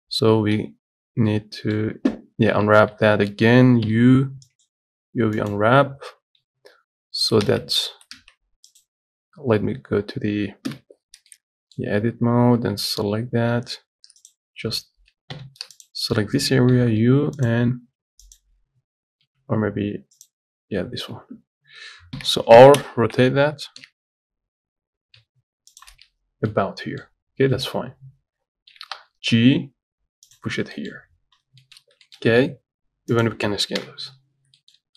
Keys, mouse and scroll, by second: 1.0 z, 1.5-2.9 middle drag, 2.9 Tab, 3.2 a, 5.8 u, 6.5 Tab, 7.7 ctrl+z, 8.4 ctrl+z, 9.0-10.9 drag, 10.9 KP_Decimal, 11.5-14.5 middle drag, 14.5 alt+click, 15.6 3, 16.1 alt+click, 18.6 u, 22.4 r, 26.5 scroll down 1, 26.7 middle click, 27.3 scroll down 2, 27.8 middle click, 28.0 scroll up 2, 29.0 g, 30.8 scroll down 7, 31.0 middle click, 31.6 scroll down 10, 31.9 shift+middle click, 32.0 scroll up 3, 32.3 shift+middle click, 32.8 s, 34.0 KP_7, 34.6 scroll down 1, 34.8 shift+middle click.